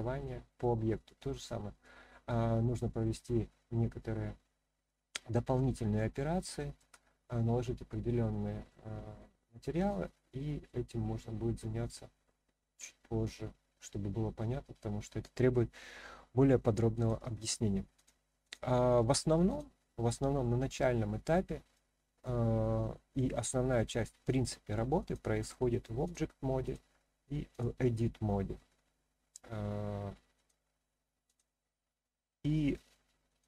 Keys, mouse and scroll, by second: 1.8-5.6 middle drag, 6.2 shift+scroll up 1, 6.2-6.8 shift+middle drag, 7.3-8.7 scroll down 1, 8.7-10.6 middle drag, 10.9-11.5 scroll up 1, 16.9 click, 18.4-19.6 drag, 20.4-21.7 middle drag, 25.0-26.1 drag, 26.6-27.6 drag, 30.3 click, 33.3-33.4 drag.